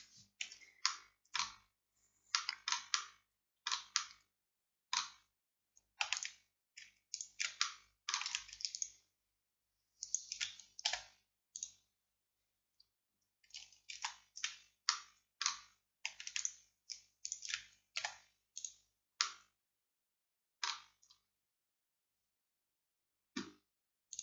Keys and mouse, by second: 0.9-5.7 middle drag, 6.2-11.0 middle drag, 11.0-14.0 drag, 11.0 x, 14.0 ctrl+z, 15.0-16.4 drag, 18.1 x.